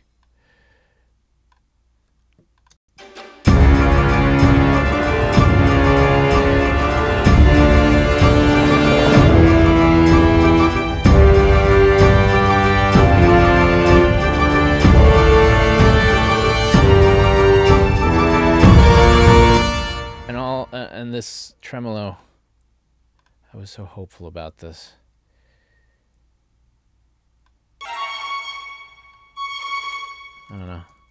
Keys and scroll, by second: 2.8 space, 19.5 space, 30.6 super+a.